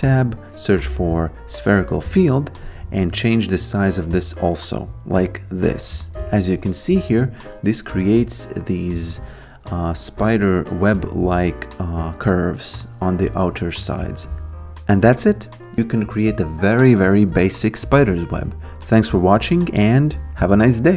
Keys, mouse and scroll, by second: 2.8 t, 3.2 click, 6.9 alt+right click, 7.7 alt+click, 10.7 alt+middle click, 14.8 alt+middle click, 14.9 alt+right click, 15.1 alt+middle click, 15.5-16.4 typing, 15.9 click, 16.3 click, 16.8 click, 17.6 alt+click, 17.7 alt+right click, 17.9 alt+middle click, 17.9 alt+click, 18.0 alt+right click, 18.1 alt+middle click, 18.6 alt+middle click, 18.7 alt+right click, 18.8 click, 19.2 click, 19.5 click, 20.0 click, 20.7 click.